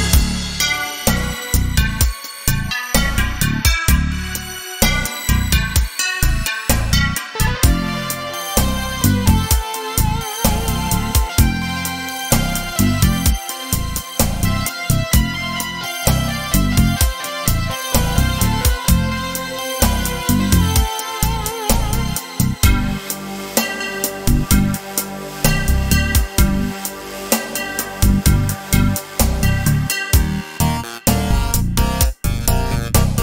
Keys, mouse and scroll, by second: 1.6 click, 2.8 shift+click, 3.9-7.9 drag, 8.0-11.1 drag, 11.4 scroll down 2, 11.7-13.5 middle drag, 12.9 g, 13.8 middle click, 14.2 click, 15.5-17.2 middle drag, 17.2 click, 18.6-22.0 shift+scroll up 1, 22.0 shift+click, 23.3 click, 24.1-30.2 middle drag, 26.4 KP_0, 27.5-28.5 scroll down 2, 30.2-32.8 drag, 32.5 scroll down 1.